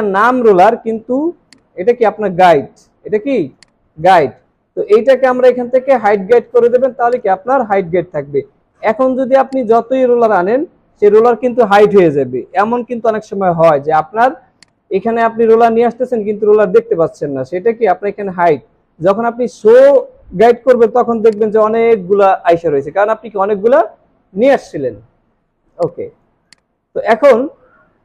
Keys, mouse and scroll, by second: 4.8 right click, 14.6 right click.